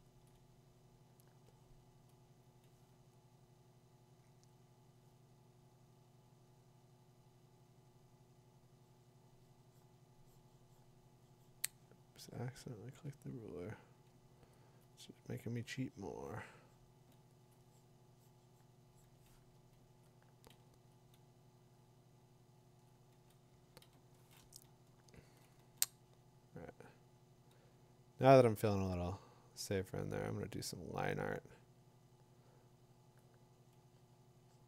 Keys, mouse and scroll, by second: 0.2 alt+click, 5.2 click, 7.7 click, 14.7 click, 17.4 click, 22.9 click, 23.8 click, 26.9 [.